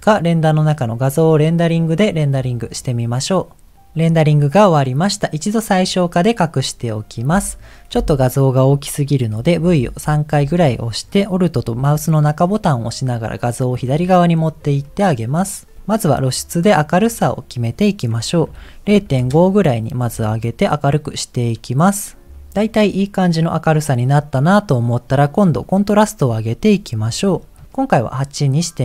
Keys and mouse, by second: 0.5-1.5 drag, 2.3 click, 9.4 v, 9.8 v, 12.5-13.7 alt+middle drag, 14.8 middle click, 17.0-19.3 drag, 25.6-27.6 drag, 27.8-28.8 middle drag.